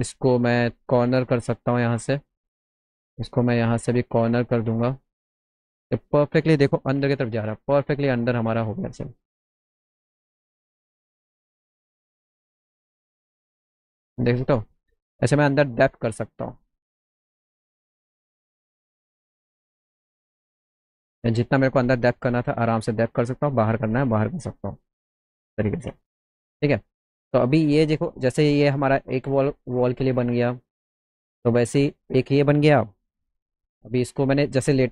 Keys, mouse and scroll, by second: 0.4 right click, 1.7 click, 3.4 click, 3.8 right click, 5.0 click, 6.1 click, 7.7-9.6 alt+middle drag, 10.4-11.5 drag, 11.8 ctrl+z, 12.3 alt+middle click, 13.3-14.3 drag, 16.5 click, 19.7 ctrl+z, 21.5 alt+middle click, 21.9-23.3 alt+middle drag, 25.2 alt+middle click, 25.6 ctrl+z, 26.0 ctrl+z, 26.8 alt+middle click, 27.3 middle click, 27.6 middle click, 28.1 middle click, 28.6 alt+middle click, 30.0 click, 31.2 middle click, 31.8 alt+middle click, 34.8 click.